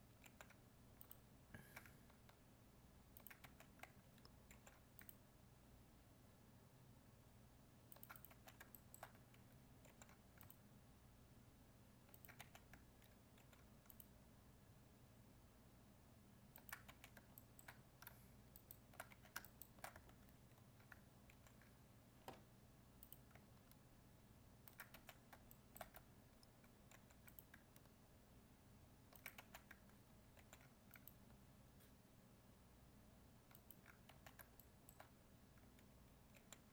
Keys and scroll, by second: 0.2 ctrl+r, 4.5 ctrl+r, 9.8 ctrl+r, 13.3 ctrl+r, 21.3 ctrl+e, 26.9 ctrl+r, 30.3 ctrl+r, 36.3 ctrl+r.